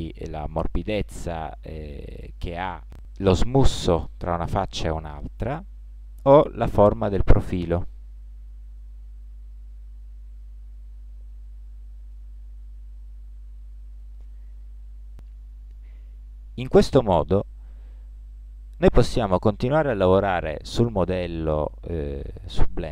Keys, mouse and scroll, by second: 3.8-6.2 middle drag, 6.2-8.0 drag, 18.7-20.6 middle drag.